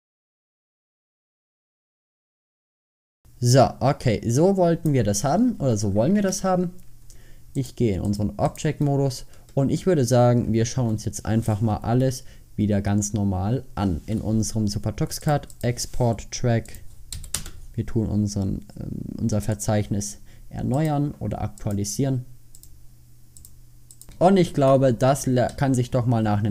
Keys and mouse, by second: 1.1 middle click, 1.3 drag, 2.9 middle click, 3.0 click, 5.2 middle click, 5.7 Escape, 6.3 Tab, 9.0 middle click, 10.9 alt+h, 11.8 KP_5.